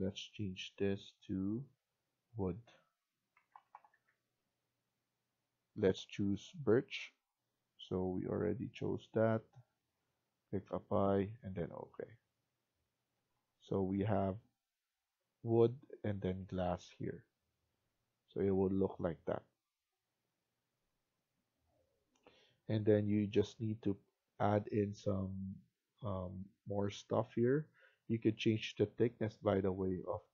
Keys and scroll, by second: 3.1-4.3 typing, 13.6 Escape, 13.8 Escape.